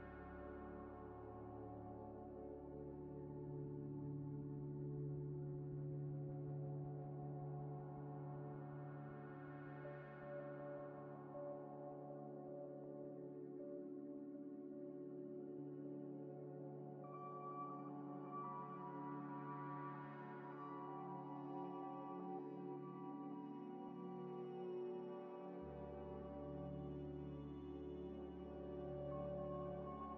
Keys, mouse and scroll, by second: 0.1 z, 0.5 scroll up 1, 0.9 middle click, 1.4 scroll down 1, 1.6 middle click, 2.3 s, 2.4 x, 2.9 y, 5.1 double click, 5.3 middle click, 6.9 g, 7.0 x, 8.3 scroll up 1, 9.1 middle click, 9.6 g, 9.7 x, 11.0 middle click, 12.0 middle click, 12.1 scroll down 1, 12.7 z, 12.9 scroll down 1, 13.9 scroll up 1, 14.5 scroll down 1, 15.1 shift+a, 16.2 scroll up 1, 16.5 s, 17.9 Tab, 18.6 g, 18.7 x, 19.1 y, 20.9 g, 20.9 x, 21.4 y, 23.6 g, 23.7 z, 25.9 Tab, 26.2 scroll up 1, 26.7 middle click, 27.5 s, 27.6 x, 29.9 middle click.